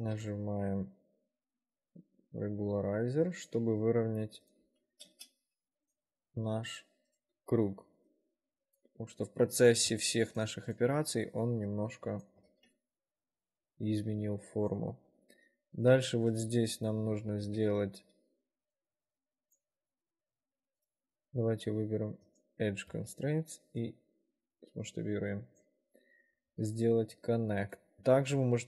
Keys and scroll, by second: 0.2 ctrl+r, 3.7 w, 4.0 1, 5.2 space, 7.7 s, 12.7 ctrl+r, 15.4 2, 17.6 ctrl+alt+e, 23.1 r, 25.6 `, 26.6 ctrl+r.